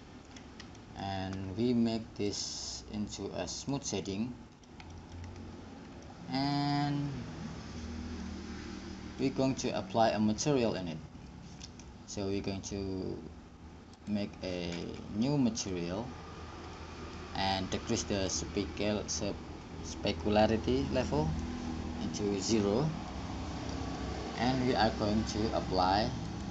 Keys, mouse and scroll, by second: 0.5 middle click, 2.5 click, 4.3-5.6 drag, 5.6-12.8 middle drag, 14.1-17.7 drag, 17.7 middle click, 18.4-26.4 middle drag, 26.4-26.5 drag.